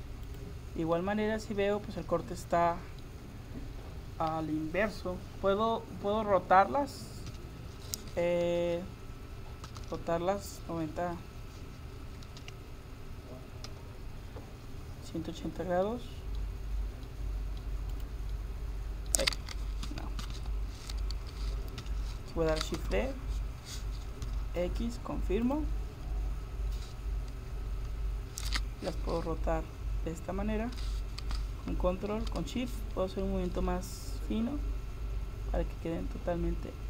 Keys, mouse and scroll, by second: 1.0 middle click, 1.4 click, 2.0-3.4 middle drag, 7.3 KP_7, 8.7-9.7 drag, 9.7 r, 18.4-19.9 middle drag, 19.9 ctrl+z, 20.2 ctrl+z, 21.8 KP_7, 22.8 shift+d, 27.7 r.